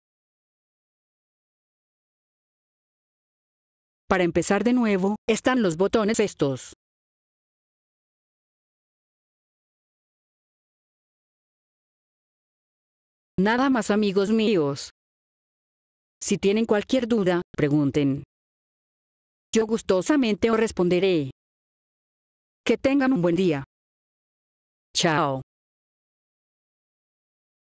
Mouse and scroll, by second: 0.2 click, 0.6 click, 0.9 click, 1.2 click, 1.6 click, 2.0 click, 3.6 click, 6.0 click, 7.1 click, 7.6 click, 7.8 click, 8.0 click, 8.4 click, 8.7 click, 9.0 click, 9.3 click, 9.6 click, 10.1 click, 10.1 right click, 10.5 click, 12.9 click, 21.7 click, 23.7 click.